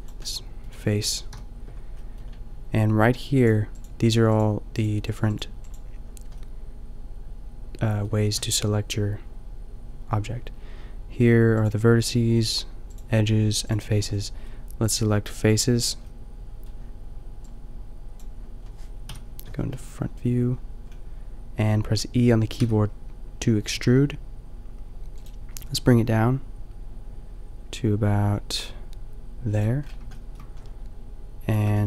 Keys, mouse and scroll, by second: 1.3 KP_5, 8.2-12.2 middle drag, 19.0 KP_5, 25.5 g, 29.8-31.5 shift+middle drag.